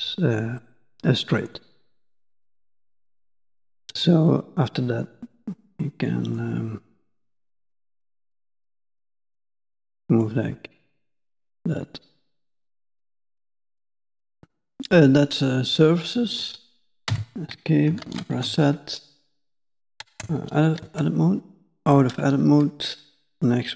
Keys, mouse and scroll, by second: 0.6 middle click, 2.0 shift+middle click, 2.7 middle click, 3.2-3.7 scroll up 3, 5.8 middle click, 11.6 middle click, 12.3 middle click, 14.3 middle click, 18.1 ctrl+z, 18.8 scroll down 1, 18.8 middle click, 19.4 shift+middle click, 20.1 Tab, 20.6 scroll down 1, 20.6 middle click, 21.0 middle click.